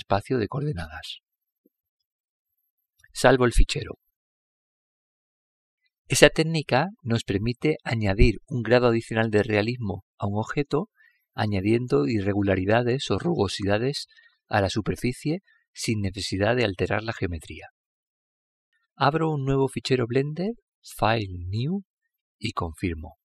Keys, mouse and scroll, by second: 0.5 click, 2.4 click, 4.1 click, 5.7 click, 8.1-10.1 middle drag, 19.6 click.